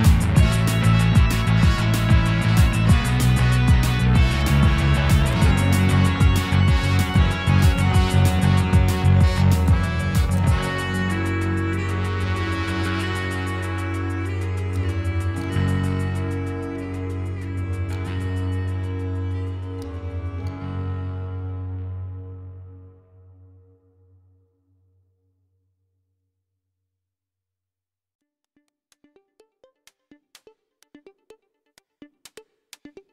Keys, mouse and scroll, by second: 0.0 Tab, 0.3 a, 0.9 o, 1.0 Tab, 1.3 shift+middle drag, 1.5-1.9 scroll up 1, 1.9 Tab, 2.6-3.2 middle drag, 3.2-3.7 scroll up 1, 3.7 click, 4.2 shift+middle drag, 4.4-4.8 scroll up 1, 5.1 click, 6.2 click, 6.5 shift+click, 7.9 shift+click, 8.6 scroll down 2, 8.9 shift+middle drag, 9.1-10.0 scroll up 2, 10.2 shift+click, 11.5 click, 13.3 click, 14.0-14.7 shift+middle drag, 15.4 click, 17.1 click, 19.4-20.3 shift+middle drag, 20.3 click, 21.4 shift+click, 22.7 click, 24.0 click, 25.2-26.2 middle drag, 26.2-26.6 scroll down 2, 26.6-27.4 shift+middle drag, 27.4-28.7 scroll up 4, 28.7-29.3 shift+middle drag, 29.3 ctrl+r, 30.6 click, 31.1 click, 31.2 g, 32.7 click, 32.8 g.